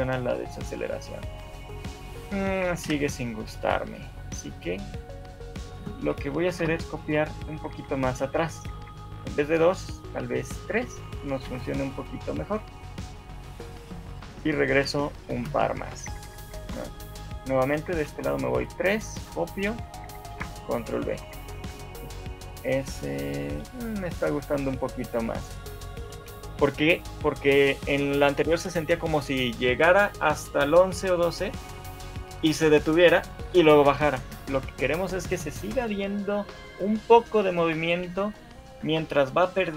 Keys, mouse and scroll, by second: 2.9 Escape, 3.9 right click, 4.7 click, 5.7 shift+click, 6.7 Delete, 7.1 Left, 7.3 Right, 7.5 Right, 7.7 Right, 8.5 Right, 8.7 Right, 9.4 Left, 11.0 Left, 13.0 ctrl+c, 13.0 click, 14.2 ctrl+c, 14.2 Left, 14.4 Left, 15.4 ctrl+v, 16.0 Right, 16.2-16.8 Right, 17.8 Right, 18.2 Right, 18.6 Right, 19.8 Right, 19.8 ctrl+c, 20.2 Right, 20.4 ctrl+v, 21.2 shift+Left, 21.6 alt+a, 26.0 scroll up 2, 26.4 shift+middle click.